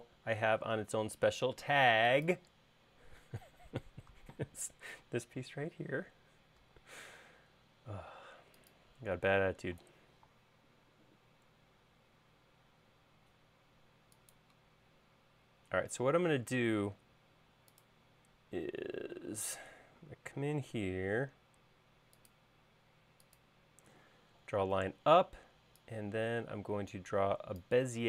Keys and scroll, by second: 7.2 i, 20.5 i.